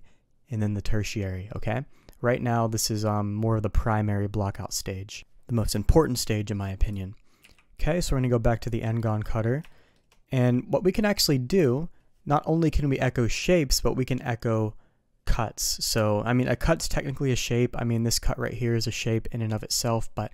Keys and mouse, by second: 6.8 click, 9.6 shift+middle drag.